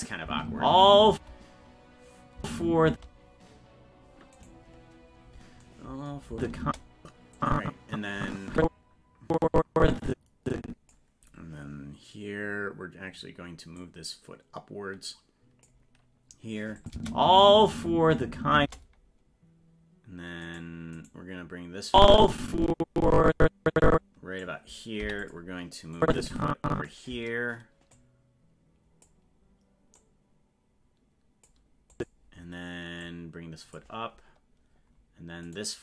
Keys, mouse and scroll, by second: 0.0 click, 0.2 space, 4.5 right click, 6.3 space, 7.4-10.9 drag, 13.8-15.7 drag, 16.8 click, 16.9 space, 20.6 right click, 21.9-24.5 drag, 25.0 i, 26.0 click, 27.9-29.1 drag, 30.0-31.5 drag, 31.9 click, 33.0 click, 35.5 right click.